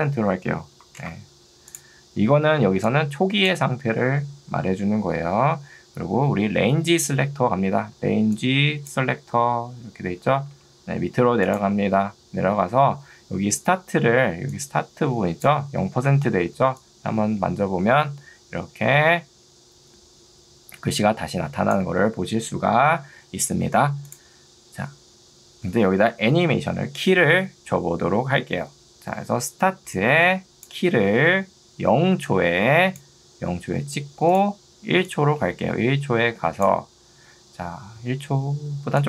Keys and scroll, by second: 0.9 0, 1.1 Return, 2.7 ctrl+2, 8.1 ctrl+2, 10.7 Escape, 14.5 2, 16.1 Escape, 29.5 ctrl+2, 31.1 Escape, 32.1 ctrl+2, 33.7 Escape.